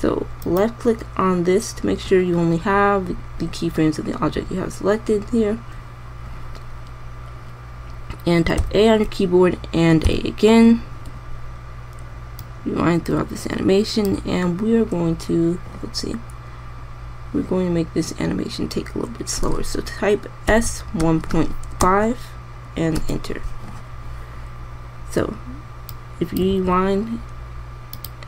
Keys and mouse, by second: 1.1-2.6 drag, 9.3 a, 10.8 a, 21.1 s, 27.2 alt+a.